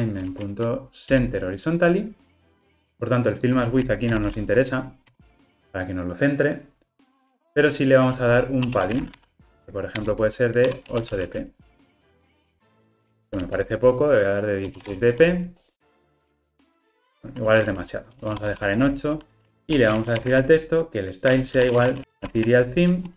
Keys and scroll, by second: 10.0 Return, 21.4 Return.